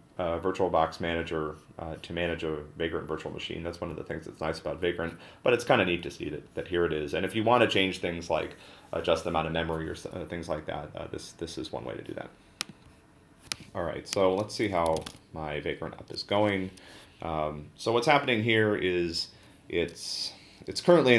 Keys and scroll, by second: 14.8-15.6 typing.